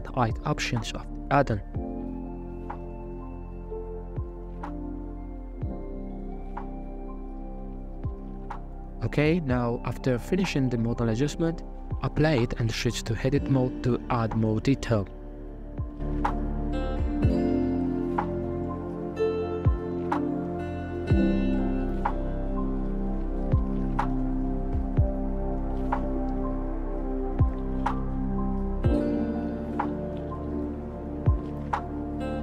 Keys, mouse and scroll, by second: 1.9-3.4 shift+drag, 3.5-7.3 shift+drag, 7.3-7.7 middle drag, 7.7 right click, 7.9 middle click, 8.3 ctrl+z, 9.6 click, 10.0-11.8 middle drag, 11.8 n, 12.2-12.7 middle drag, 12.7 Tab, 13.0 alt+z, 13.3 scroll down 1, 13.4 middle click, 13.6 scroll up 3, 13.8 c, 17.0 f, 18.3 alt+z, 18.8 shift+middle click, 19.5 scroll up 3, 19.9 scroll down 1, 20.1 e, 22.5 s, 26.5 g, 28.2 ctrl+r, 29.7 s.